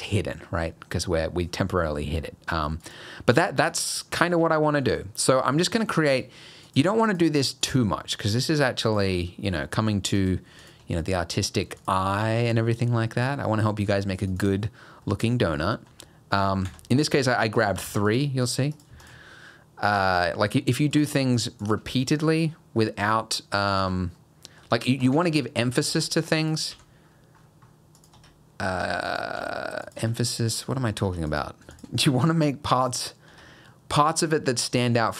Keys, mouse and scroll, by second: 1.1-2.2 scroll up 1, 2.2 middle click, 2.8 click, 3.4 g, 4.2 Tab, 4.6 middle click, 5.3 click, 5.7 middle click, 6.1 click, 6.7 click, 7.1 click, 7.6 click, 8.9 click, 9.5 Tab, 9.8 middle click, 10.2 click, 10.6 shift+click, 11.8 click, 12.2 e, 15.1 middle click, 15.9 s, 17.6 click, 17.9 shift+click, 18.1 shift+click, 18.4 click, 18.7 click, 19.0 shift+click, 20.9 click, 21.4 shift+click, 21.6 shift+click, 22.0 r, 23.8 Tab, 24.2 middle click, 24.7 Tab, 25.3 ctrl+z, 25.7 ctrl+z, 25.9 ctrl+z, 26.4 click, 28.0 g, 28.2 Tab, 28.8 Tab, 29.1 click, 29.4 g, 30.0 Tab, 30.3 middle click, 31.1 Tab, 31.3 click, 31.7 shift+click, 32.0 g, 33.3 Tab, 33.7 middle click, 34.1 scroll down 2, 34.3 middle click.